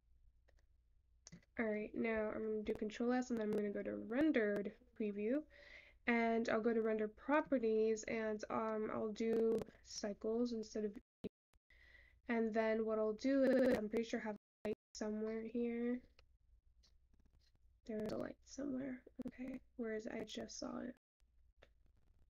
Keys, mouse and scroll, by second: 2.6-4.5 scroll down 1, 4.5 click.